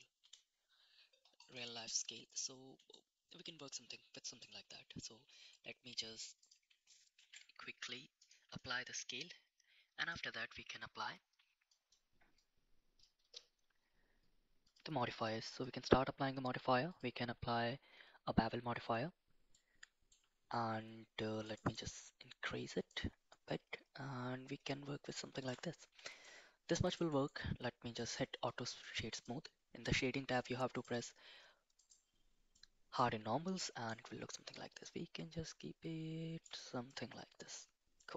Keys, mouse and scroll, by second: 2.0-2.4 middle drag, 2.9-4.4 middle drag, 5.2 ctrl+s, 7.2 ctrl+a, 8.6 middle click, 10.0 click, 12.4 click, 14.6 click, 15.6-18.9 drag, 19.5-20.1 middle drag, 21.5 click, 23.0-25.5 shift+drag, 26.0 shift+middle drag, 26.7 middle click, 27.2 right click, 29.1 drag, 30.7 click, 31.7 click, 32.5-33.0 middle drag, 34.0-36.4 shift+drag, 36.9-37.5 middle drag, 38.0-38.1 middle drag.